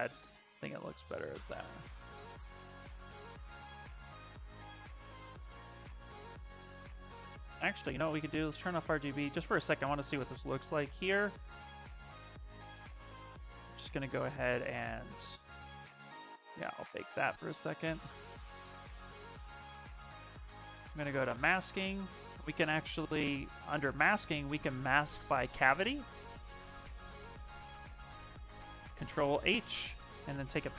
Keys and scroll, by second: 4.0 space, 4.6 s, 7.1 space, 28.7 ctrl+h, 30.3 b.